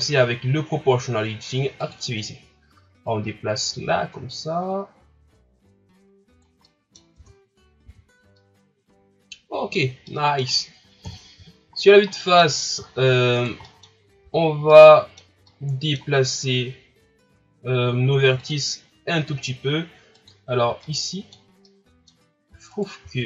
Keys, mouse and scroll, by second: 1.8 click, 3.1-6.1 drag, 6.6 middle click, 7.1 Tab, 7.7-8.4 scroll down 4, 7.8 a, 8.4-11.0 middle drag, 11.0 KP_1, 11.8 scroll up 2, 12.1 middle click, 12.5-12.9 scroll up 1, 12.9 shift+scroll down 3, 13.3 right click, 13.7 middle click, 14.0 scroll up 1, 14.2 Tab, 14.8-18.4 middle drag, 18.4-20.3 drag, 20.8-22.7 middle drag, 22.7 alt+right click.